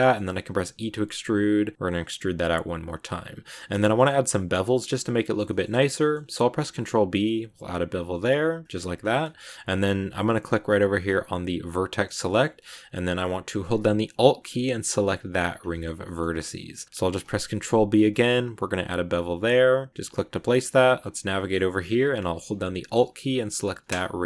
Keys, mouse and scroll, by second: 0.5 e, 3.7-5.6 shift+middle drag, 5.6 scroll up 1, 5.8 middle click, 6.5 ctrl+b, 8.9 scroll down 2, 9.1-11.6 shift+middle drag, 11.6 click, 12.1-14.7 middle drag, 14.7 alt+right click, 15.6 shift+middle click, 16.1-17.3 scroll up 1, 17.3 ctrl+b, 20.1 scroll down 1, 20.2-23.5 middle drag, 23.5 alt+right click.